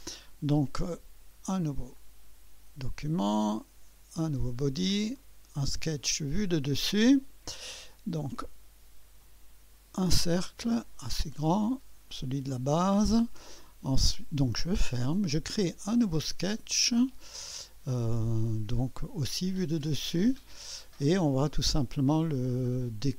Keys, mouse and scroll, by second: 0.0 click, 1.9 click, 2.3 drag, 2.7 click, 4.2 click, 5.2 click, 6.3 click, 7.0 click, 7.3 drag, 9.2-10.2 drag, 10.8 click, 12.1 click, 14.4 click, 16.2 click, 19.3 click, 20.2 click.